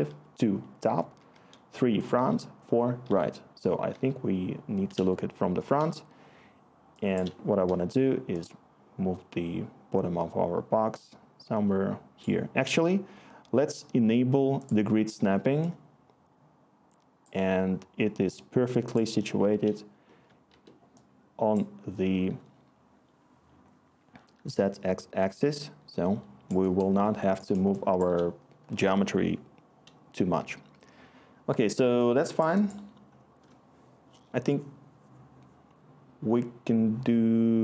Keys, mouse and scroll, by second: 0.0 2, 1.1-3.9 typing, 20.5 1.